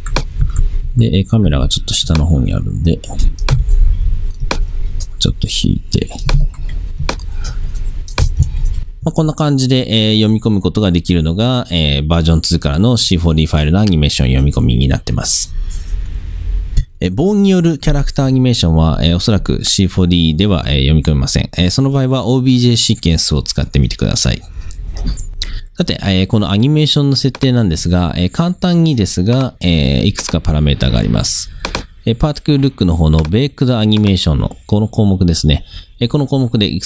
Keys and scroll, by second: 0.5 c, 3.6 c, 8.3 space, 16.8 space.